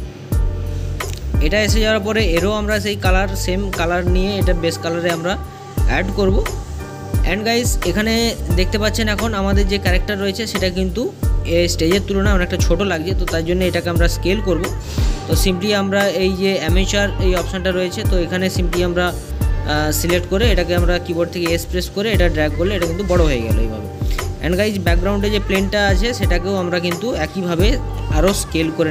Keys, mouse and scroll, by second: 0.0 click, 6.8-9.3 middle drag, 10.9 click, 14.2 s, 17.6 middle click, 18.3-19.0 scroll up 1, 19.0 middle click, 19.9-21.0 scroll down 1, 21.0-22.6 scroll down 1, 22.6 scroll down 1, 22.7 s, 27.1 click.